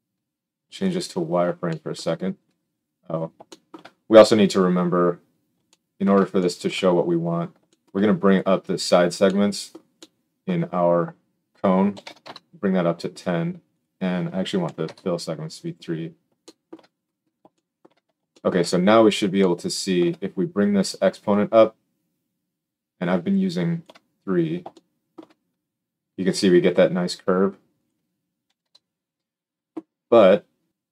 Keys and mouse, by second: 0.9-1.9 drag, 1.9-3.6 shift+middle drag, 3.6 shift+click, 3.7 middle click, 3.8-4.6 drag, 4.6-7.2 middle drag, 7.2 right click, 8.1-20.5 middle drag.